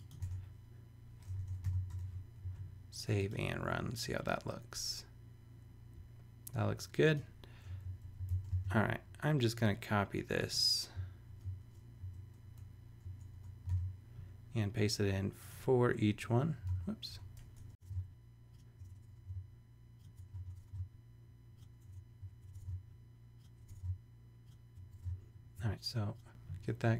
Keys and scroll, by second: 0.2 super+Tab, 1.6 shift+super+3, 1.9 super+;, 2.4 super+s, 7.8 shift+Up, 8.3 shift+super+Left, 8.5 shift+super+c, 9.5 super+c, 11.3 super+BackSpace, 12.0 Down, 12.4 Return, 13.0 BackSpace, 13.6 super+BackSpace, 13.7 super+v, 16.1 BackSpace, 16.6 super+BackSpace, 16.7 super+z, 17.1 super+Return, 17.6 BackSpace, 17.8 super+v, 18.8 shift+Return, 18.9 BackSpace, 19.2 super+v, 20.1 BackSpace, 20.2 super+z, 20.4 super+Return, 20.5 BackSpace, 21.7 Return, 22.4 BackSpace, 22.6 super+v, 23.5 Return, 23.6 BackSpace, 24.7 Return, 24.8 BackSpace.